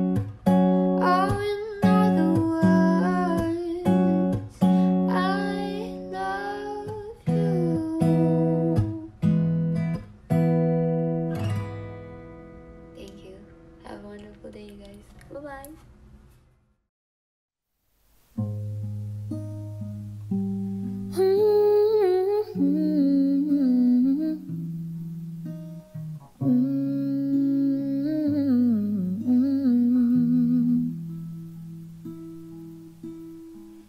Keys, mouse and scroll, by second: 9.6 p.